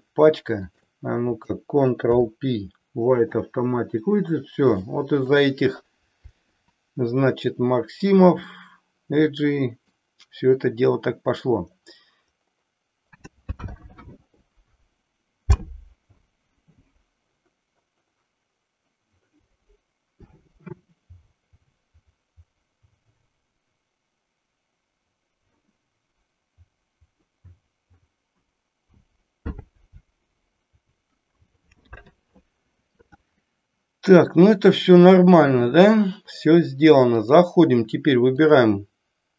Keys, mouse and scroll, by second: 0.7 shift+click, 2.1 ctrl+p, 5.0 shift+middle click, 8.5-10.0 middle drag, 37.2 click, 38.3 click.